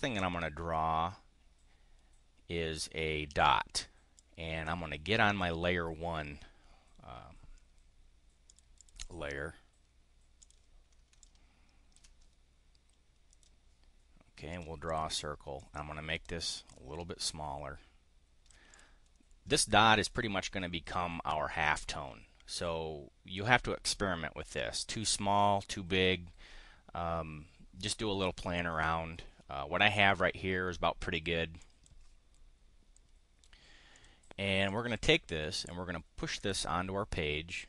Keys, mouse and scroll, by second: 4.1-5.5 drag, 8.5 click, 8.8 click, 10.4 click, 11.2 ctrl+click, 13.3 click, 14.5 click, 14.8 click, 15.5 click, 16.6-18.5 ctrl+drag, 18.7 click, 31.6 click, 33.9 click, 34.6 click, 36.4 click.